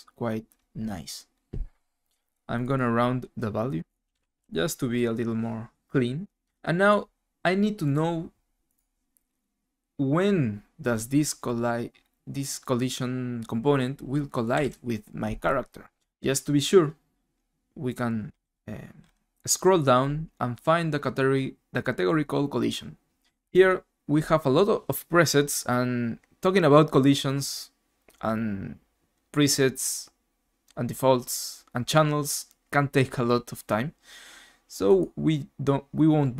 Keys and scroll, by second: 1.3 typing, 3.9-4.6 typing, 8.5-9.2 typing, 14.3-15.1 typing, 18.2-19.0 typing.